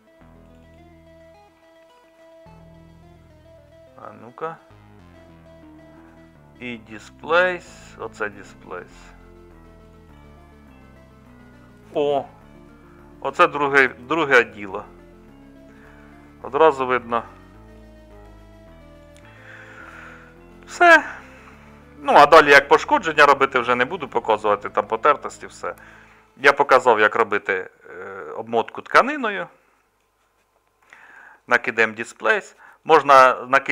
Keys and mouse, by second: 17.3-21.5 middle drag, 22.2 middle click, 22.7-24.7 middle drag, 27.4-28.5 middle drag, 28.8-30.8 middle drag.